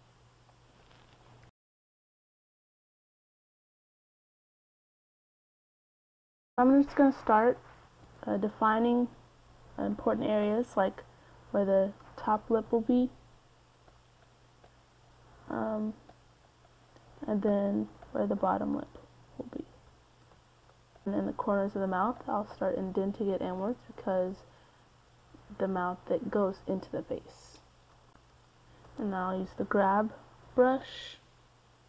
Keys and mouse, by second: 8.1 middle click, 9.3 middle click, 9.7 KP_1, 11.2 f, 13.0 KP_1, 21.3-25.5 middle drag, 25.9-29.2 middle drag, 29.9 g, 30.1 f, 31.5-31.8 drag.